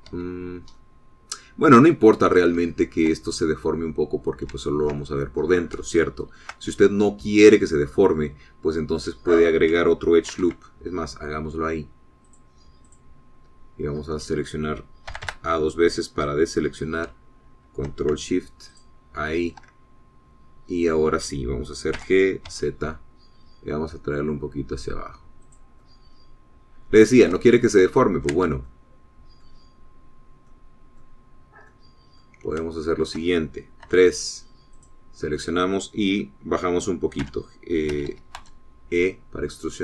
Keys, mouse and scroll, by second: 1.2 Escape, 1.8-3.0 middle drag, 3.1 scroll up 1, 3.8 shift+click, 5.6 shift+middle click, 5.7 shift+click, 6.9 shift+click, 11.3 ctrl+r, 13.4 click, 13.9 click, 16.2 a, 19.8 alt+shift+click, 23.0 g, 23.6 z, 26.5 click, 26.9-28.5 middle drag, 29.0 ctrl+z, 29.8 ctrl+middle click, 31.6 middle click, 32.3 scroll up 2, 32.8 middle click, 33.7-34.8 shift+middle drag, 35.0 3, 35.9 click, 38.3 g, 39.0 Escape, 39.6 e.